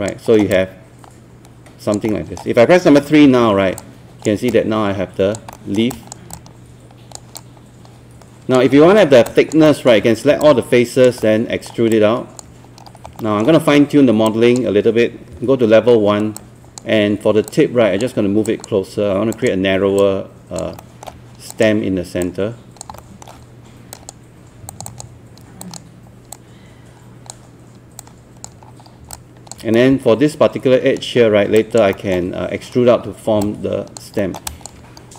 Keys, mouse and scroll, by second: 0.4 alt+middle click, 0.5-1.9 alt+drag, 2.1 alt+middle click, 3.3 alt+3, 3.8 alt+click, 5.5 alt+middle click, 5.9 alt+click, 6.3 alt+click, 7.4 alt+click, 9.0 alt+middle click, 9.3 alt+click, 9.7 alt+middle click, 10.5 alt+click, 11.2 alt+middle click, 11.9 alt+click, 12.9-13.4 scroll up 2, 14.3 click, 15.3 1, 15.9-16.4 scroll up 1, 16.4 click, 20.8 alt+middle click, 21.5 click, 23.0 alt+middle click, 23.9-27.9 drag, 28.7 scroll down 1, 29.1 alt+click, 29.7-31.5 right drag, 31.6 alt+click, 31.9 alt+middle click, 33.1-33.4 alt+scroll down 1, 33.4 alt+click, 34.2 alt+middle click, 34.5 alt+click, 35.0 scroll up 1.